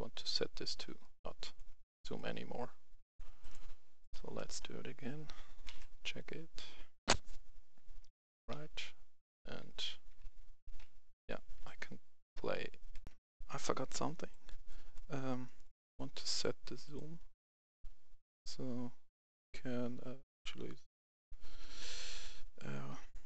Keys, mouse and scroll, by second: 1.0 right click, 3.1 click, 4.3-5.5 right drag, 4.7-5.5 w, 8.5 e, 9.6-11.2 typing, 12.4-12.9 typing, 13.0 click, 13.1 F10, 13.9 right click, 15.5 right click, 16.8 click.